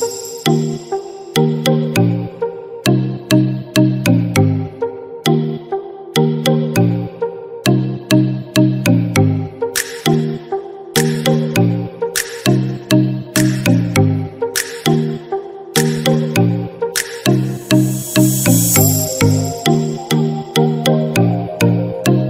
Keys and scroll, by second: 0.7 ctrl+d.